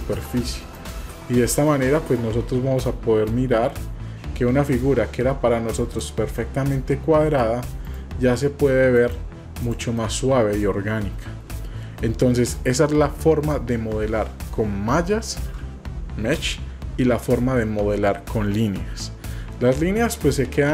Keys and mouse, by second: 1.8 middle click, 1.8 typing, 3.3-7.4 drag, 7.8 right click, 9.6 click, 10.1-12.0 middle drag, 15.5 shift+a, 20.6 click.